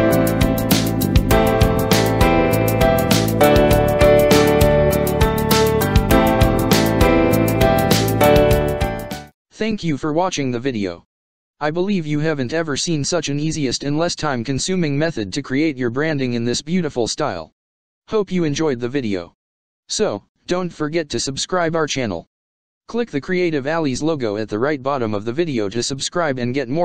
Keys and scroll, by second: 4.4 ctrl+v, 6.0 ctrl+s, 9.0 space.